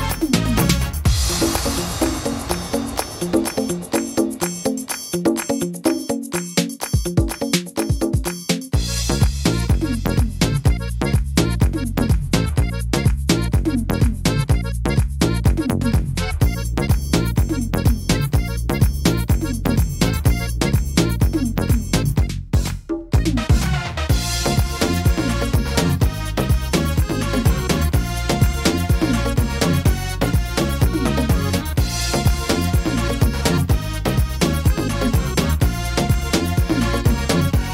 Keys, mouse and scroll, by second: 0.7 click, 1.8 middle click, 2.7 right click, 3.5 shift+right click, 4.1 right click, 5.0 click, 6.2 middle click, 7.0 right click, 7.5 shift+right click, 8.0 shift+right click, 9.0 click, 9.9 middle click, 10.7 right click, 11.4 shift+right click, 11.9 shift+right click, 12.7 click, 14.5 scroll up 1, 14.5 middle click, 14.8-15.1 scroll down 3, 15.5 scroll down 3, 15.6 shift+middle click, 16.1 scroll down 1, 16.6 middle click, 17.0 shift+middle click, 17.5 scroll up 1, 17.9 middle click, 18.3-18.9 scroll down 3, 19.0 scroll up 2, 19.5 a, 20.1 right click, 21.1 l, 22.1 click, 23.7 click, 25.5 middle click, 25.7 scroll down 3, 26.2 shift+middle click, 26.5 scroll up 4, 27.1 shift+middle click, 27.5-28.0 scroll up 3, 28.0 middle click, 28.7 shift+middle click, 29.2 right click, 29.7 shift+right click, 30.6 shift+d, 33.0 e, 34.6 middle click, 35.7 click.